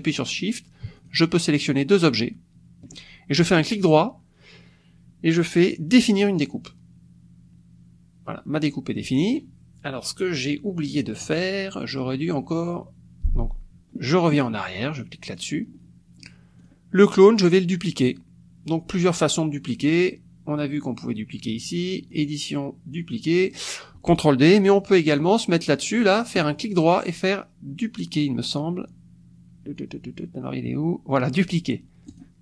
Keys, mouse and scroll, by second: 0.3 click, 0.9 shift+click, 1.6 shift+click, 2.1 shift+click, 3.6 click, 6.2 click, 15.3 click, 16.6 click, 17.0 click, 22.1 click, 24.5 click, 25.1 click, 26.4 right click, 32.1 click.